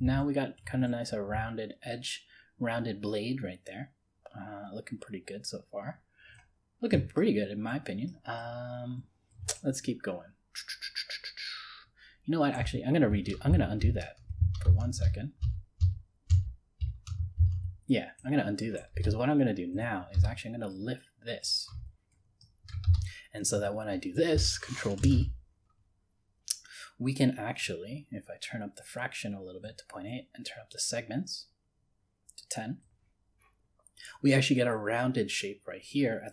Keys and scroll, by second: 13.5 ctrl+z, 25.0 ctrl+b.